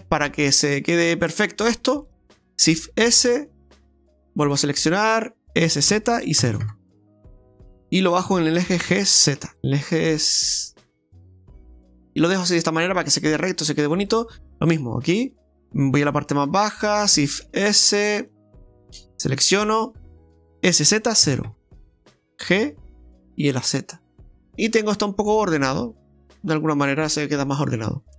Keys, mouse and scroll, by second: 1.5-2.0 scroll up 2, 2.0 shift+middle click, 2.4 click, 2.4 right click, 2.8 shift+s, 4.4 alt+shift+right click, 5.6 s, 8.9 g, 11.6 middle click, 13.5 middle click, 14.7 right click, 15.0 alt+shift+right click, 15.2 right click, 15.7 middle click, 16.6 right click, 17.4 shift+s, 18.8 middle click, 19.6 alt+shift+right click, 20.8 s, 23.3 g, 24.3 middle click, 24.6 right click, 25.0 scroll down 1, 25.4 middle click, 27.5 scroll down 1.